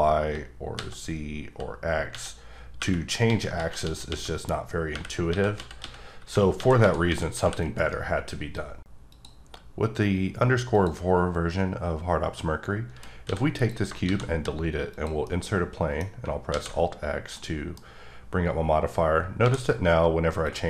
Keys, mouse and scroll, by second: 0.8 x, 1.5 z, 2.1 x, 3.2 x, 3.6 z, 3.8 x, 4.9-7.4 typing, 7.7 right click, 10.7 click, 12.3 middle click, 13.2 x, 13.5 click, 14.0 shift+a, 14.9 click, 15.2 middle click, 17.3 middle click, 19.4 d, 20.4 click.